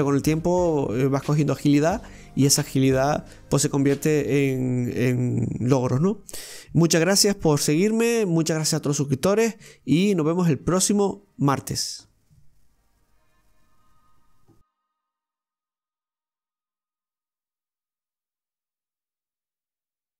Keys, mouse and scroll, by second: 16.4-17.6 drag, 18.8 click.